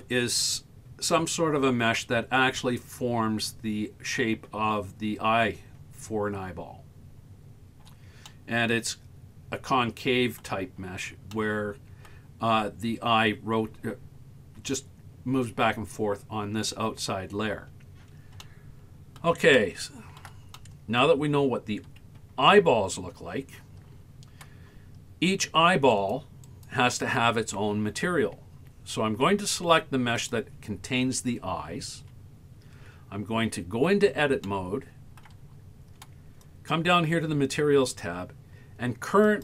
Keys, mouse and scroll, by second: 8.3-10.4 middle drag, 10.9-11.3 scroll up 3, 11.3 middle click, 17.7-18.4 scroll down 4, 18.4 middle click, 19.6 shift+middle click, 20.6 middle click, 22.6 Tab, 26.0 right click, 26.5 right click, 30.2 click, 32.1 Tab, 34.5 shift+middle click, 36.5 click, 39.3-39.4 drag.